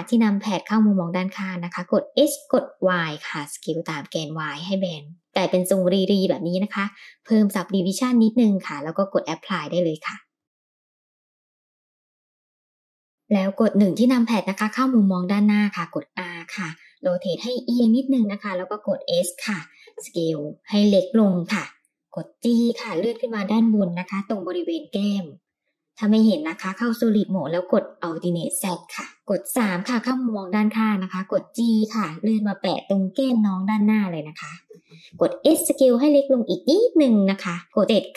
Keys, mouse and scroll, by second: 0.2 KP_3, 1.8-3.0 scroll up 4, 1.8 s, 5.6-6.1 middle drag, 6.3-7.7 scroll down 2, 7.7 click, 8.8-9.3 middle drag, 10.6-11.6 drag, 13.3 KP_1, 14.6 r, 16.8 s, 21.4 Tab, 23.4 g, 28.0 click, 28.7 alt+z, 28.7 click, 30.1 KP_3, 32.1 g, 35.0 s, 37.6 KP_7.